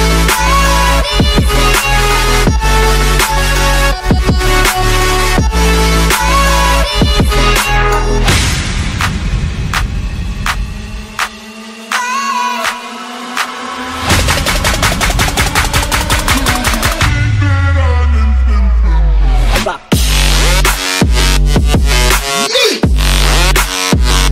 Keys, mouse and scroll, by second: 0.0 click, 2.1 click, 3.6 click, 4.3 click, 6.2 click, 7.2 click, 7.7 click, 8.9 click, 9.2-10.8 typing, 11.2 click, 12.1 click, 12.4-13.3 typing, 15.1 click, 16.1 ctrl+click, 16.5 ctrl+click, 17.0 ctrl+click, 18.3 click, 19.2 click, 20.0 click.